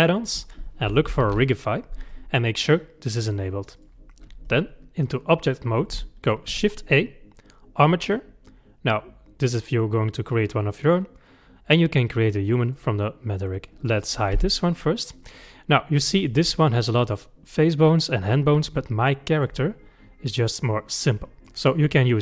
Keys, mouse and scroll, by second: 6.5 shift+a, 13.8 click, 14.4 h, 15.2 click, 16.2 click, 16.5-19.4 middle drag, 19.4 click, 20.9-22.2 middle drag.